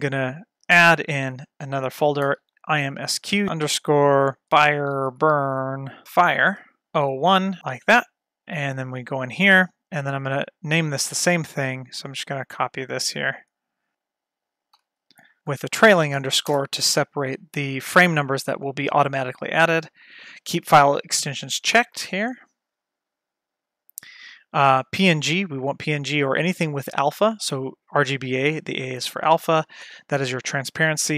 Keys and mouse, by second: 8.8 click, 8.9 click, 12.0-14.8 drag, 14.9 ctrl+v, 15.4 click, 18.5 click, 23.0-24.2 drag.